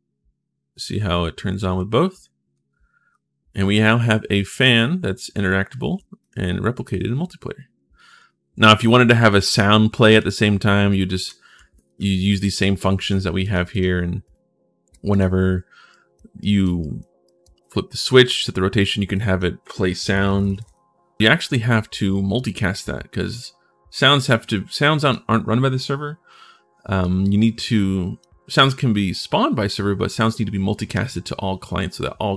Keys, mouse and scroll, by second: 1.5 a, 2.4 s, 4.1-4.8 typing, 6.3-7.0 typing, 9.9 w, 11.0 a, 12.7 click, 13.2 click, 13.5 click, 14.0 click, 14.9 click, 15.7 right click, 16.2 right click, 16.6 right click, 17.0 right click, 18.9 click, 19.8-20.9 typing, 23.9-24.9 right drag, 26.8-28.0 drag.